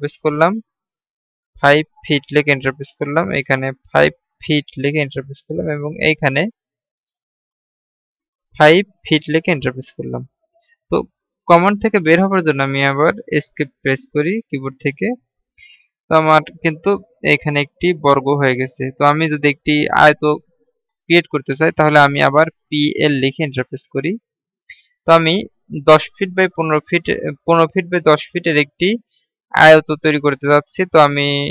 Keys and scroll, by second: 14.2 Escape, 23.1-23.8 typing.